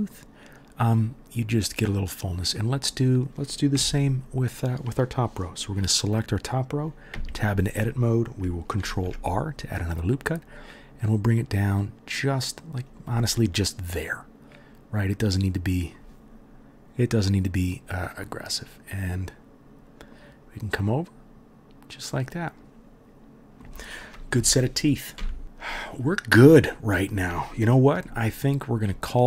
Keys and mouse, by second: 1.5 middle click, 1.5 right click, 3.7 Tab, 3.9 middle click, 4.0-6.8 drag, 7.1 Tab, 8.6-17.5 ctrl+drag, 8.8 ctrl+r, 17.5 middle click, 17.6-29.2 drag, 24.3 KP_3, 25.2 KP_1.